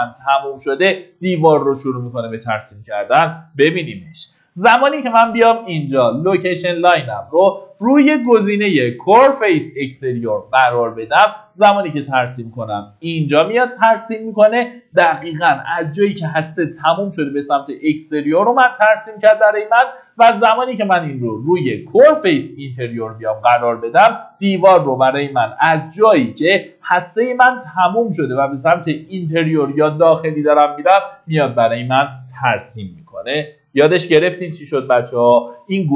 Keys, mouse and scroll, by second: 6.7 middle click, 8.3 click, 13.9 Escape, 14.2-15.3 scroll up 1, 18.2 scroll down 1, 20.3 click, 23.1 middle click, 23.8 scroll up 1, 24.5 click, 27.0 Escape, 27.4-31.0 scroll up 1, 32.2-32.7 scroll down 1.